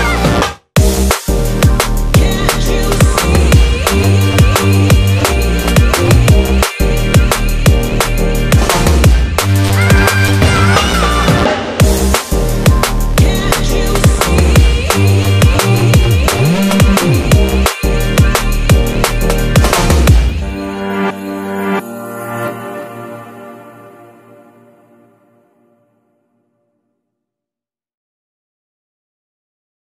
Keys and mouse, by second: 0.9-1.6 ctrl+KP_6, 2.6 Tab, 3.7-6.5 ctrl+middle drag, 6.5 click, 7.9 f, 11.2-12.4 ctrl+middle drag, 12.4-13.0 ctrl+KP_2, 14.0-15.8 middle drag, 15.8-19.8 right drag, 19.8 ctrl+z, 23.1-25.8 ctrl+middle drag, 25.8 k.